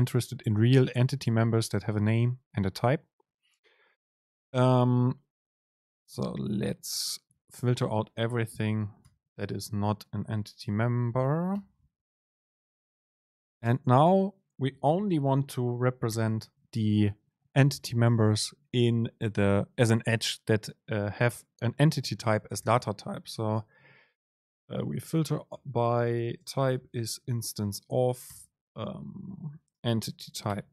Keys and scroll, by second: 7.0 super+space, 13.8 super+space, 25.3 super+space.